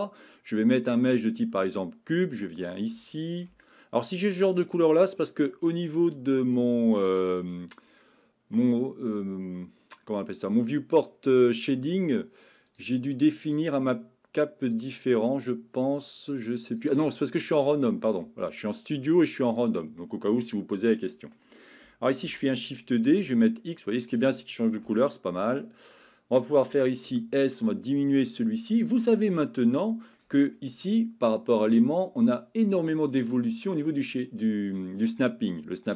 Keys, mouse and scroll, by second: 3.8-4.6 shift+middle drag, 6.5-10.2 drag, 12.8-19.7 drag, 20.1-21.3 middle drag, 22.2 shift+d, 23.1 x, 24.2 click, 25.0-25.4 shift+middle drag, 25.7 middle click, 27.1 s, 28.3 click, 29.2 middle click, 29.7-30.2 middle drag, 31.6 click, 32.3-35.9 drag.